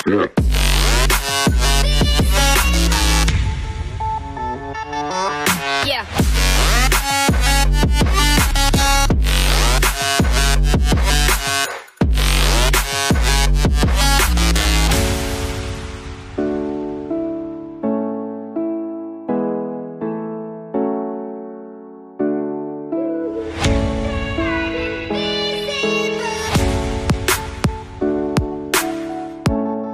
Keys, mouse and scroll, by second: 7.1 right click, 8.0 right click, 9.0 alt+scroll up 1.